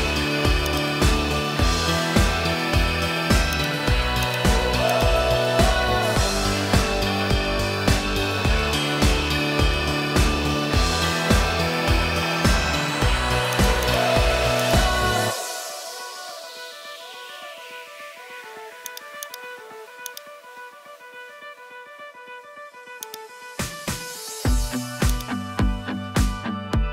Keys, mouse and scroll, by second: 0.7-3.6 drag, 2.1 o, 5.0-13.6 drag, 7.9 BackSpace, 12.1 p, 13.9 click, 14.7-18.9 drag, 16.7 o, 20.2-23.1 drag, 25.1 click, 26.1 ctrl+Tab.